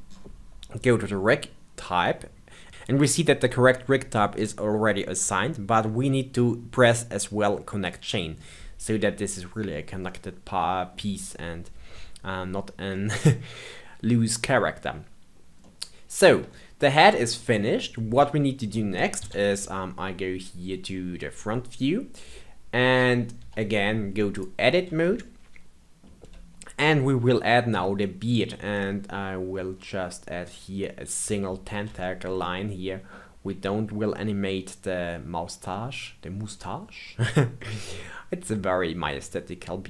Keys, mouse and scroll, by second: 0.8-2.7 scroll down 1, 7.8 click, 9.6-10.0 scroll down 2, 10.0-12.4 middle drag, 12.4-12.9 scroll down 1, 12.9-14.3 middle drag, 14.3-15.6 scroll up 2, 15.6-16.2 middle drag, 16.2-17.1 scroll down 1, 17.1-18.1 scroll up 2, 18.1-19.1 scroll down 4, 19.1 KP_1, 20.3-22.5 scroll up 2, 22.5-23.3 scroll up 1, 23.3 Tab, 24.2 click, 25.0-28.0 shift+middle drag, 28.8-29.7 middle drag, 29.7-31.9 scroll up 2, 31.9-35.4 shift+middle drag, 35.6-39.8 middle drag.